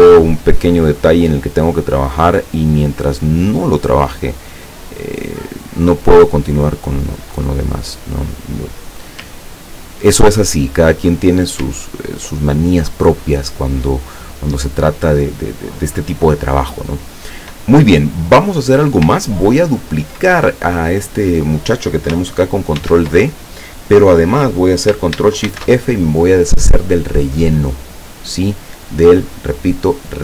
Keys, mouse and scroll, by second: 2.2-4.4 drag, 4.8-6.0 drag, 6.6-9.0 drag, 9.5-9.9 ctrl+scroll down 2, 10.7 ctrl+click, 11.9 ctrl+scroll down 2, 18.5 click, 19.4-19.7 ctrl+scroll up 2, 20.3 ctrl+click, 22.8 ctrl+d, 25.5 ctrl+shift+f, 26.7 click, 27.6 click.